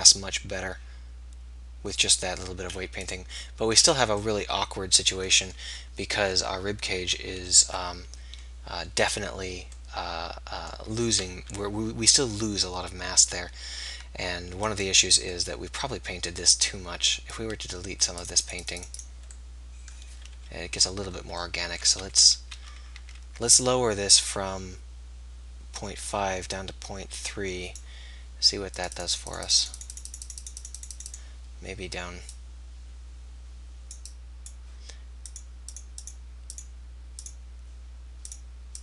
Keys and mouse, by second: 10.0-14.4 drag, 11.4 KP_3, 14.8-17.4 right drag, 17.4-21.9 drag, 20.3 KP_3, 21.9-22.5 ctrl+z, 23.1 ctrl+z, 23.5 middle click, 24.3-26.2 drag, 27.2-28.8 middle drag, 28.8-38.8 drag.